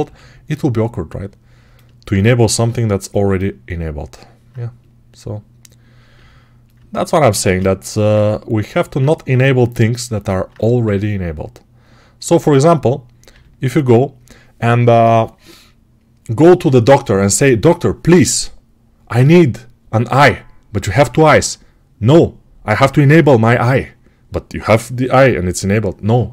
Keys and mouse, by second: 1.5-5.4 alt+middle drag, 2.4 s, 5.4-6.6 right drag, 6.0 g, 6.6-26.3 alt+middle drag, 7.3 shift+d, 9.2 s, 10.7 g.